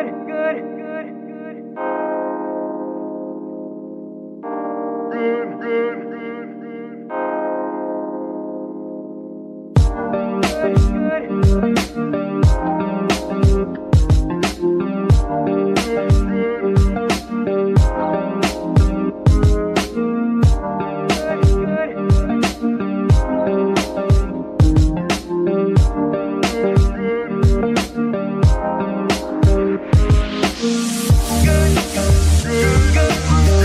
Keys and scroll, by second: 2.5 z, 7.1 z, 9.5 z, 15.0 KP_Divide, 22.6 Tab, 22.9 Tab, 31.7 shift+g, 32.5 Escape.